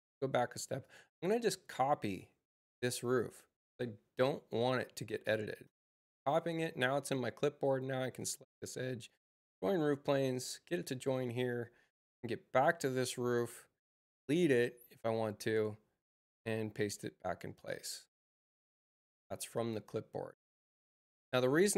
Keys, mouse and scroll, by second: 0.7 click, 2.8 click, 3.9 c, 5.6 space, 6.1 click, 7.5 right click, 8.9 right click, 9.5 right click, 11.2 click, 13.2 click, 14.2 x, 16.4 shift+c, 19.2 space.